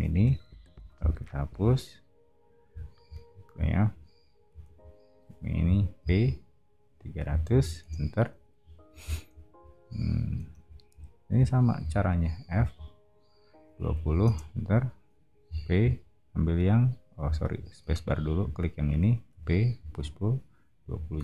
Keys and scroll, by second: 0.5 e, 4.5 space, 5.6 p, 7.0-8.6 typing, 10.4 space, 11.8 f, 13.6-15.4 typing, 17.9 space, 19.3 p, 20.8-21.2 typing.